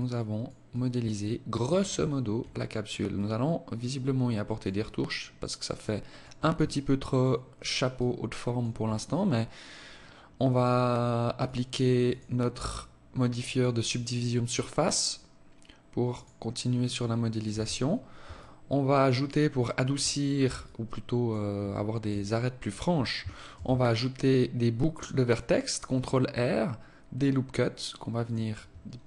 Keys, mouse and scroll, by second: 0.1 alt+click, 1.4-1.8 scroll down 3, 1.9 alt+click, 2.7 alt+click, 4.3 alt+click, 6.0 alt+click, 7.3 alt+click, 10.8 click, 11.5 click, 14.1-15.4 scroll up 2, 15.5 click, 16.9 Tab, 17.8 alt+click, 19.5 scroll up 1, 20.0 alt+click, 21.1 alt+shift+click, 21.7 alt+click, 22.9 ctrl+r, 28.5 ctrl+r.